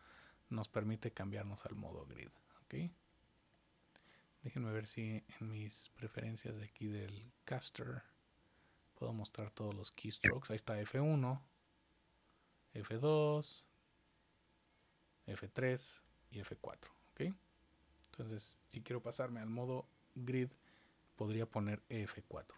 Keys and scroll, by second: 10.0 F1, 12.5 F2, 15.5 F3, 16.4 F4.